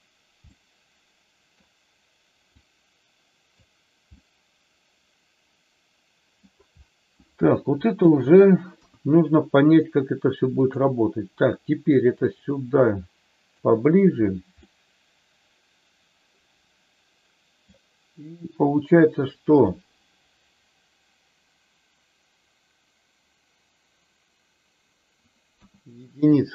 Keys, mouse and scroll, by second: 0.5-1.6 middle drag, 2.5 click, 4.1-6.4 middle drag, 7.9 KP_3, 8.6 KP_1, 10.5 click, 12.3-13.5 drag, 14.6-17.6 middle drag, 25.6 KP_1, 26.2 click.